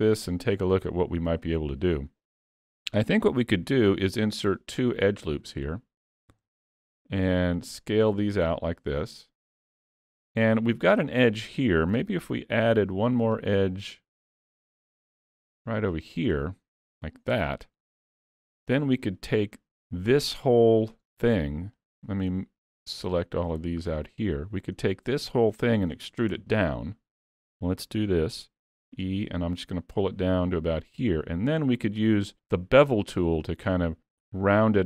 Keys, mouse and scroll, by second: 2.1 middle click, 3.8 ctrl+r, 6.3 s, 9.8 middle click, 12.3 ctrl+r, 16.2 middle click, 18.5 3, 19.1 click, 19.9 middle click, 21.8 shift+click, 22.3 middle click, 23.5 shift+click, 24.0 middle click, 25.4 shift+middle click, 26.4 KP_3, 28.9 e.